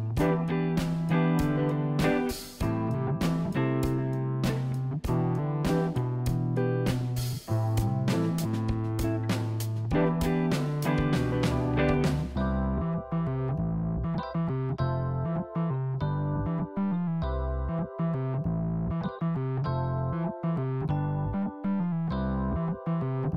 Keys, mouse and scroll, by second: 0.1-0.7 scroll up 1, 0.7 Tab, 2.0-4.3 drag, 4.3 click, 5.2 f, 5.5 click, 6.5-7.0 scroll down 1, 7.0 middle click, 7.9 click, 8.7 f, 9.1 click, 9.7-11.4 middle drag, 11.6-12.5 scroll up 1, 12.5 click, 12.9-13.2 scroll up 1, 13.2-14.8 middle drag, 16.8-17.4 scroll down 2, 17.4-19.1 middle drag, 19.8-21.5 middle drag, 22.7-23.3 middle drag.